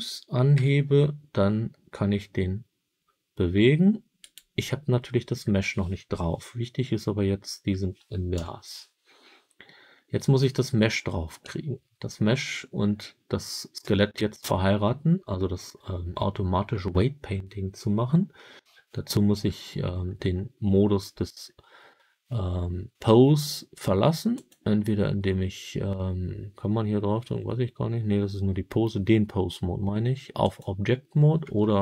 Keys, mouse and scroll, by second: 0.4 g, 4.1 right click, 8.2 KP_1, 24.2 click.